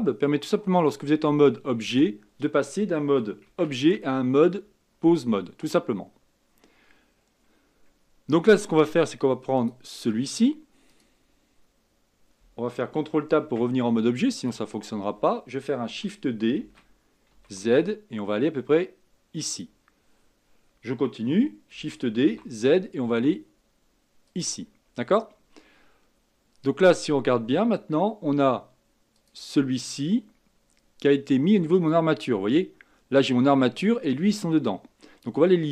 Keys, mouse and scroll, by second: 0.8 click, 1.5-2.1 scroll up 5, 3.4 ctrl+Tab, 6.6-7.2 scroll down 2, 7.2-7.5 scroll up 1, 7.6-9.5 scroll down 1, 9.5 click, 10.9 click, 13.4 ctrl+Tab, 14.3 click, 14.8-16.6 scroll down 3, 16.6 shift+d, 21.7 shift+d, 29.1 click, 31.7 click.